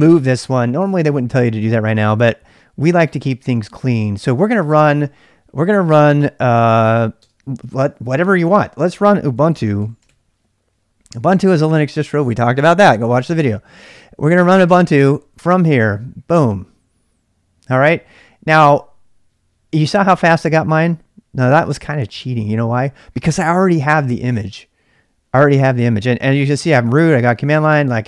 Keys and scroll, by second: 0.0-0.3 typing, 1.5-2.2 typing, 7.3 space, 9.3-10.6 typing, 14.8 Return, 26.5-27.3 typing.